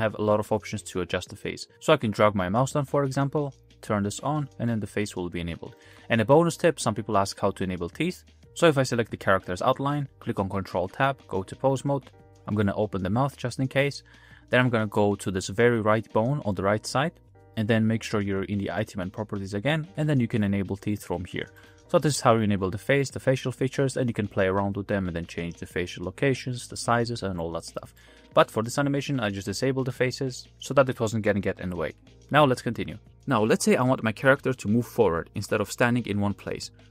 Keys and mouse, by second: 2.6-4.3 drag, 4.8-5.2 middle drag, 5.8 shift+middle drag, 6.2-8.4 middle drag, 8.4 a, 10.8 ctrl+Tab, 12.6 click, 12.9 g, 15.5 click, 21.6 g, 22.1 ctrl+z, 22.3 ctrl+z, 22.5 ctrl+z, 22.7 ctrl+z, 23.1 ctrl+z, 23.3 ctrl+z, 25.5-26.6 middle drag, 26.8 ctrl+z, 27.4 middle click, 28.2 ctrl+z, 29.9 middle click, 31.9 n, 32.6 click, 34.1 space, 35.2 space.